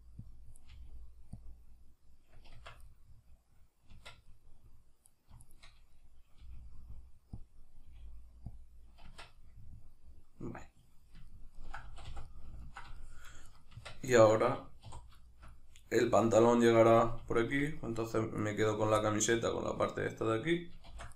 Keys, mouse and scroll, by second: 0.4 click, 0.6 right click, 0.8 g, 1.4 click, 2.6 Tab, 2.9-5.1 middle drag, 4.0 Tab, 5.1 right click, 5.4 shift+right click, 6.0-7.5 middle drag, 6.4 g, 7.5 click, 7.9 g, 8.6 click, 9.1 Tab, 9.4-13.5 middle drag, 11.9 a, 13.5 right click, 13.8 Tab, 14.2-15.3 ctrl+middle drag, 14.8 3, 17.4-19.0 alt+shift+right drag, 19.0-21.1 middle drag, 20.9 shift+d.